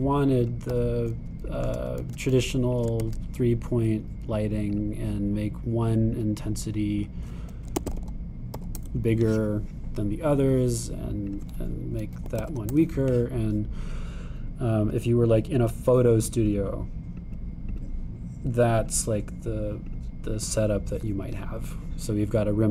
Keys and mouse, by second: 0.5 g, 1.4 g, 2.7 shift+d, 3.8 shift+d, 8.0-11.1 drag, 9.0 0, 12.3-17.6 drag, 13.4 0, 18.1 click, 18.8-22.7 drag.